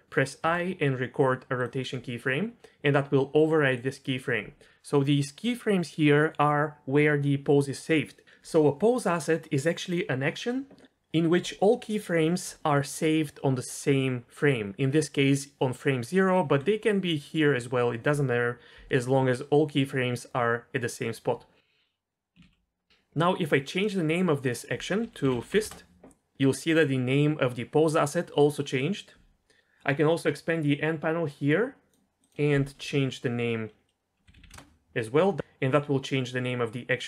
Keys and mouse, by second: 0.4 i, 3.7 drag, 16.2 click, 16.9 g, 22.4 ctrl+z, 23.8 click, 24.4-25.6 drag, 30.7-32.0 drag, 32.2-34.5 drag, 34.3 t, 34.5 t.